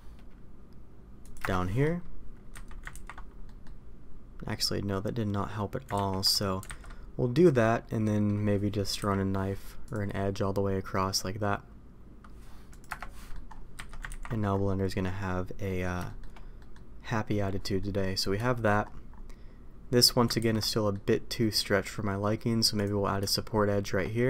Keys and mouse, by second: 2.5 a, 2.9 ctrl+t, 3.4 middle click, 5.9 ctrl+z, 6.6 alt+a, 8.0 middle click, 8.9 k, 13.1 middle click, 13.7 a, 14.1 ctrl+t, 15.6 middle click, 16.0 shift+middle click, 16.5 middle click, 17.7 middle click, 18.4 shift+middle click, 20.4 ctrl+z, 20.7 middle click, 21.3 middle click.